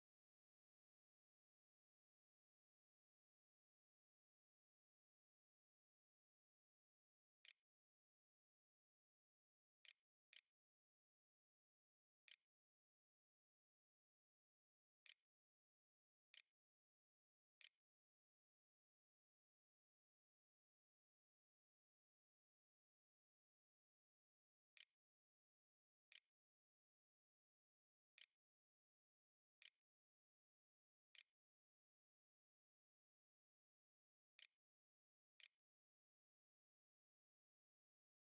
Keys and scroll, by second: 4.7 space, 5.7 n, 7.0-11.8 typing, 16.2-18.7 typing, 24.7-30.7 typing, 30.9 Delete, 31.7 \, 34.7 ctrl+z, 35.2 ctrl+s, 35.6 w.